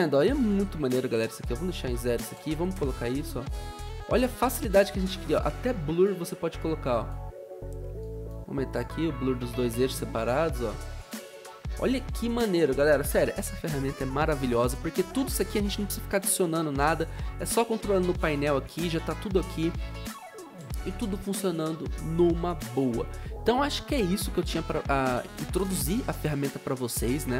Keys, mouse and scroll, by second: 0.0-0.5 typing, 2.4 0, 2.5 Return, 2.7 0, 9.9 0, 11.5 0.